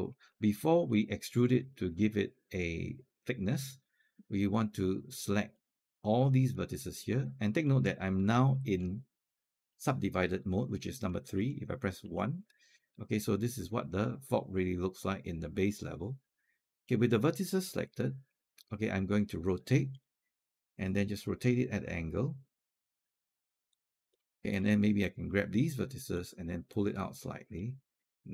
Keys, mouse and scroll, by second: 0.1 alt+middle click, 0.5 alt+click, 1.5 alt+click, 3.5 alt+click, 5.3 click, 7.1 alt+click, 11.8 1, 12.7-16.7 alt+drag, 17.8 alt+click, 19.7 alt+e, 21.1-28.3 drag, 25.8 w.